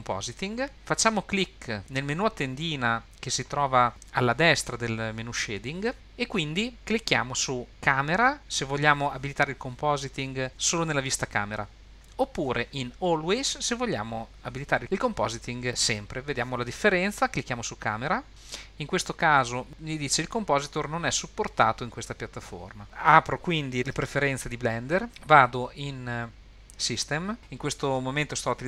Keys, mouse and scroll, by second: 5.9-22.8 drag, 24.2 super+,.